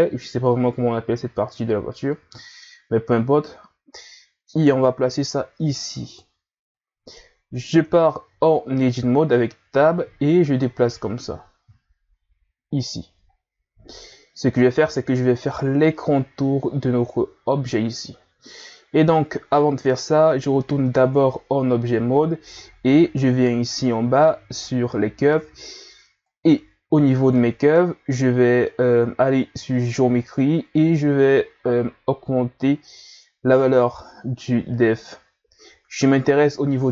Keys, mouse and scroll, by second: 0.0-0.9 scroll up 1, 0.9-3.9 drag, 6.8-7.7 scroll up 2, 7.7 Tab, 10.6-13.3 drag, 13.3-14.7 scroll up 2, 14.7-16.0 scroll up 1, 16.0-16.7 scroll up 1, 20.8 Tab, 22.6 scroll down 5, 23.7 click, 26.3-28.6 drag, 28.6 scroll down 2, 31.0-32.0 scroll down 7, 32.2-35.3 drag.